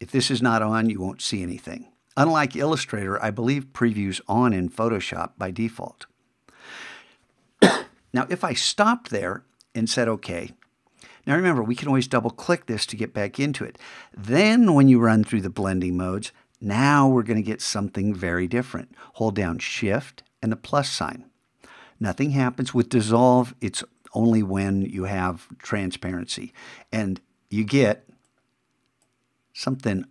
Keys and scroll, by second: 20.7 shift+=.